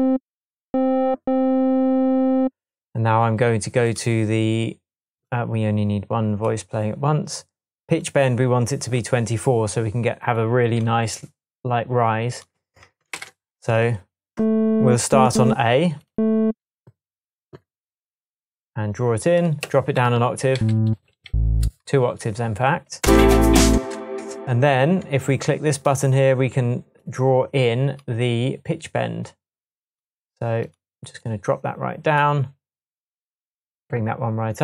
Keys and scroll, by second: 13.1 shift+super+m, 20.5 Down, 21.3 Down, 23.0 space, 23.7 space, 24.4 shift+space.